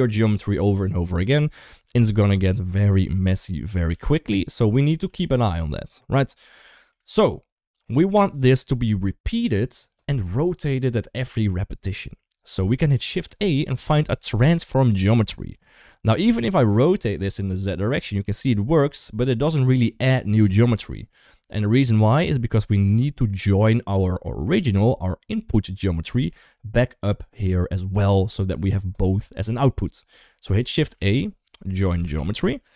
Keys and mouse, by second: 2.6 middle click, 3.2-3.5 drag, 3.7 g, 4.8 g, 6.6 shift+middle click, 12.7 shift+a, 16.9-20.0 drag, 20.2 ctrl+z, 21.2-22.9 drag, 24.1 middle click, 26.1 middle click, 30.7 shift+a.